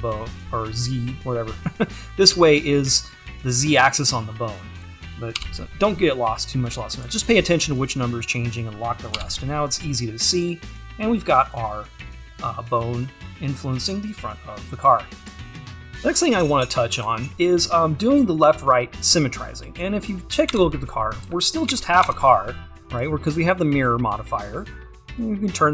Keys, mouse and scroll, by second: 15.9 scroll down 2, 16.1-16.6 scroll up 2, 16.6 scroll up 1, 20.1 click, 23.6 click.